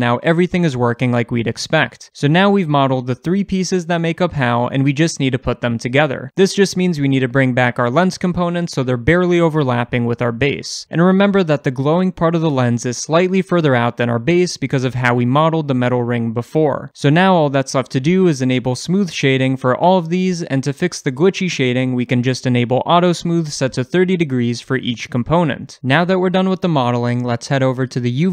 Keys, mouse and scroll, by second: 0.1-2.3 middle drag, 2.3-4.8 drag, 3.1 Tab, 4.2 alt+h, 4.8-5.5 middle drag, 5.5 click, 5.9 shift+click, 6.1-9.2 shift+middle drag, 7.0 scroll up 1, 7.2 g, 9.2 shift+click, 10.0-15.4 scroll down 1, 17.7-18.9 shift+middle drag, 18.9-23.5 right drag, 20.7 scroll up 1, 23.5 click, 27.4-28.3 shift+middle drag.